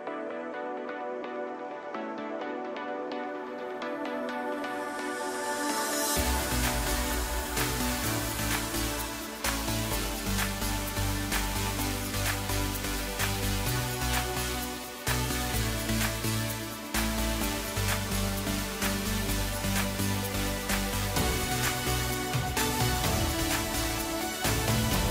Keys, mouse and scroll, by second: 3.0-5.0 middle drag, 5.0 click, 5.5-6.7 scroll down 5, 6.7-7.0 drag, 7.0-8.1 scroll down 3, 8.3-9.8 drag, 9.8 KP_Divide, 10.7-12.9 middle drag, 12.9-13.3 scroll up 1, 13.3-16.3 middle drag, 17.7-20.6 right drag, 20.6-21.7 middle drag, 21.7-22.7 right drag, 22.7 middle click, 23.7 drag, 24.0-25.1 middle drag.